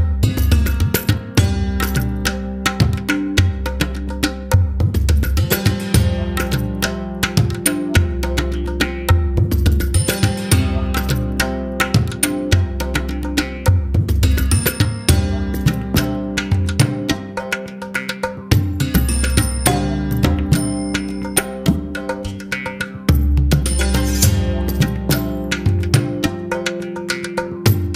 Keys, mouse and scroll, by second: 0.0-0.4 scroll down 4, 0.4-0.9 scroll up 3, 0.9-1.3 scroll down 2, 1.3-2.6 middle drag, 3.3-3.7 scroll down 2, 3.7-6.7 middle drag, 7.5 n, 12.6 click, 16.9-18.5 scroll down 5, 18.5-21.5 scroll up 2, 26.9-27.5 scroll down 1, 27.5-27.9 scroll down 1.